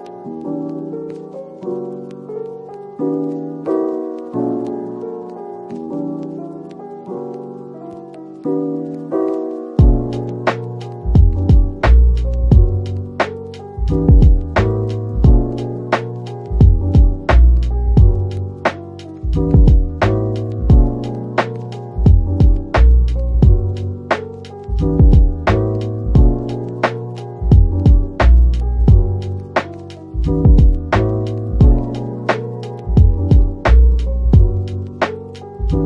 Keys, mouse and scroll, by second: 2.2 typing, 4.8 typing, 11.7 typing, 14.6 typing, 17.3-17.7 typing, 22.9-23.8 typing, 31.7-32.9 scroll down 1, 32.9 typing.